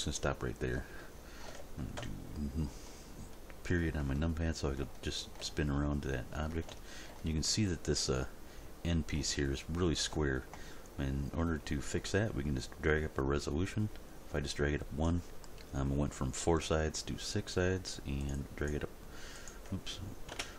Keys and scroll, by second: 2.0 Delete, 20.3 Return.